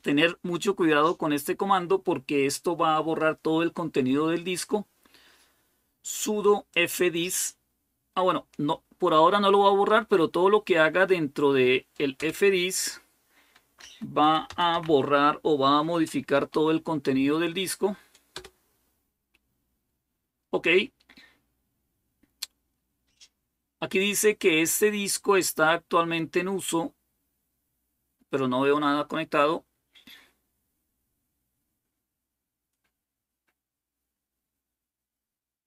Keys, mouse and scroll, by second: 6.5 click, 12.1 Return, 13.5-16.8 typing, 18.1 Return.